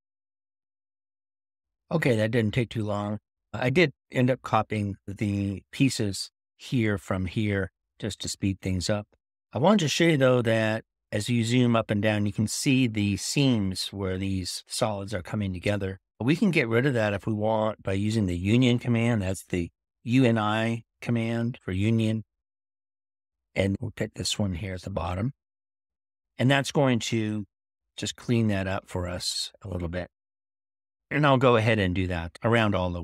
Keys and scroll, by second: 19.2-19.9 typing.